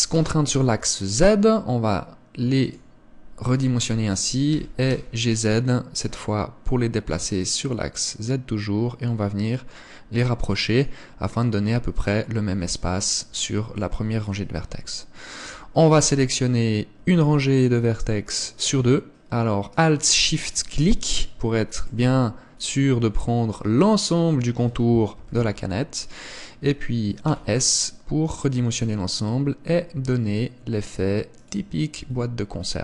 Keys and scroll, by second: 4.6 g, 25.2 KP_1, 27.4 s, 32.1 Tab.